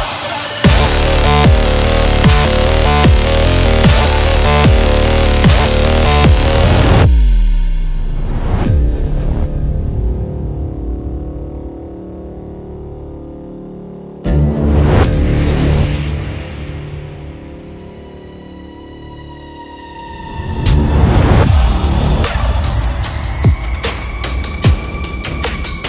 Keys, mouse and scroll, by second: 3.1 click, 4.2 ctrl+t, 5.1-9.3 drag, 9.3 Return, 10.0 Left, 10.5-10.9 scroll down 1, 11.4 space, 11.6 click, 11.7 space, 12.5 scroll up 1, 12.9 scroll down 1, 16.4 click, 18.0 scroll up 1, 18.6 click, 18.9-22.8 typing, 23.4 click, 25.5 scroll down 1.